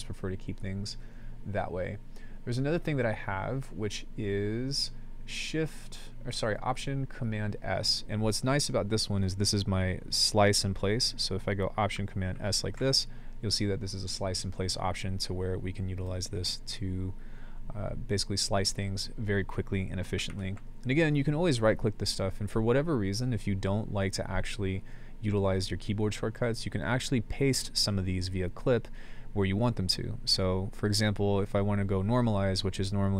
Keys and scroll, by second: 12.3 alt+super+s, 20.3 super+z.